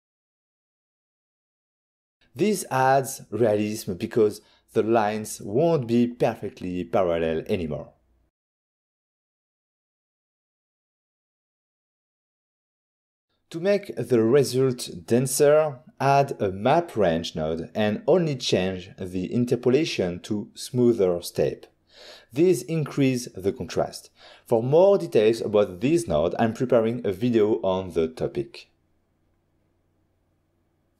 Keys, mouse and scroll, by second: 0.3 click, 4.0 click, 5.0 click, 6.4 click, 7.4 click, 9.0 click, 9.6 click, 13.1 click, 14.1 click, 15.1 click, 15.2 click, 15.5 shift+a, 15.8 click, 16.5-16.9 typing, 17.7 Down, 18.1 Return, 20.3 click, 22.5 click, 25.6 click, 27.2 click, 27.9 shift+d, 30.8 middle click.